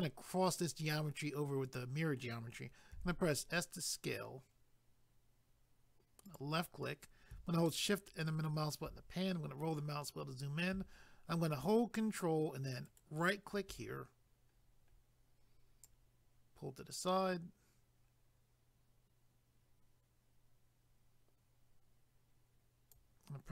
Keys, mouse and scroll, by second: 6.3 click, 7.7 shift+middle click, 9.3 scroll up 1, 12.9 ctrl+right click, 14.5 scroll up 1.